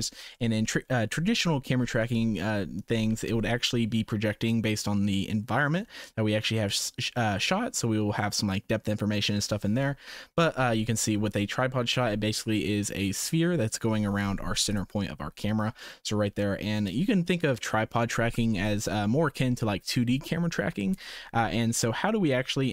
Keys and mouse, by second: 0.4 middle click, 0.9 shift+middle click, 2.0 middle click, 10.8 shift+middle click, 14.6 click, 15.9 middle click.